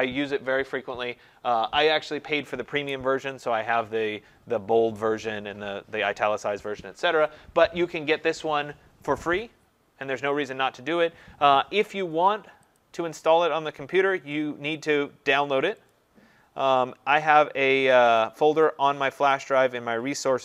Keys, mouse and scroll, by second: 12.8 click, 15.9 click, 18.3 click, 19.4 click.